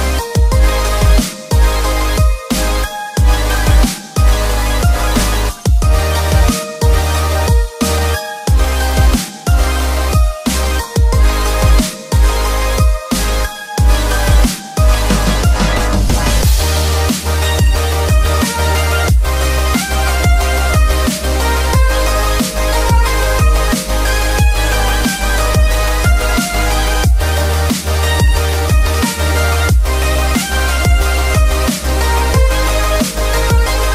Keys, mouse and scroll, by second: 1.3-3.4 drag, 4.3 Tab, 6.1 f, 8.9 i, 10.0 8, 11.0 Return, 12.5 shift+r, 13.6-15.8 typing, 19.2 3, 19.9-22.2 right drag, 25.2-25.7 scroll down 1, 25.7-27.7 middle drag, 28.2 2, 28.7 click, 29.1 alt+click, 29.7 middle click, 31.2-33.7 drag.